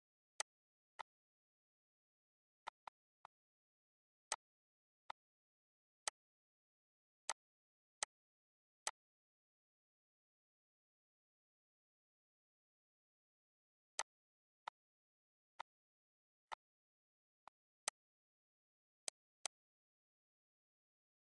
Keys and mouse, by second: 0.3 click, 1.0 click, 2.6 click, 4.3 click, 5.1 click, 6.1 click, 7.3 click, 8.0 click, 8.8 click, 9.4 ctrl+s, 13.9 click, 14.6 click, 15.6 click, 16.5 click, 17.4 click, 19.0 click, 19.9 ctrl+s.